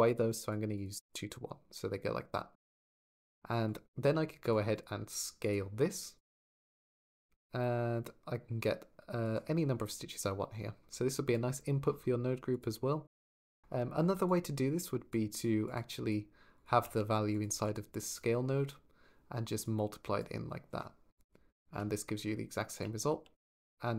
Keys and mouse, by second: 0.2 middle click, 3.1 click, 4.1 shift+d, 4.2 click, 4.6-5.3 drag, 6.1-9.0 drag, 12.3 click, 14.1 alt+click, 15.4 click, 16.5 click, 17.1 click, 17.8 click, 19.4 click, 20.9 click, 21.4 ctrl+click, 22.5 ctrl+click, 23.0 ctrl+z, 23.5 click.